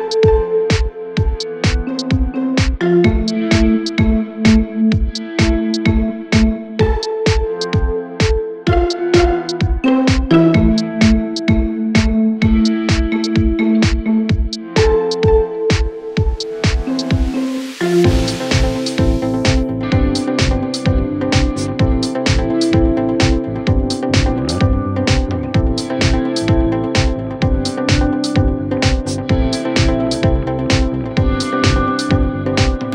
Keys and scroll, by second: 2.0 shift+Page_Down, 23.6 5, 23.7 Return, 29.8 ctrl+z, 30.6 shift+Page_Down, 31.7 w.